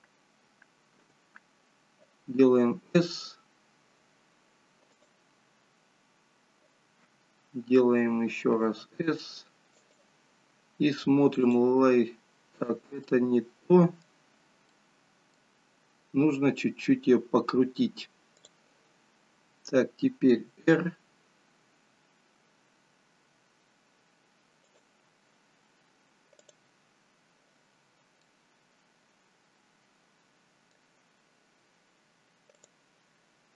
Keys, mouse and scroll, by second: 11.7 click, 12.8 scroll down 2, 13.1 middle click, 14.4-15.6 scroll up 3, 14.8 middle click, 26.7 click, 28.0 scroll down 1, 28.3 middle click.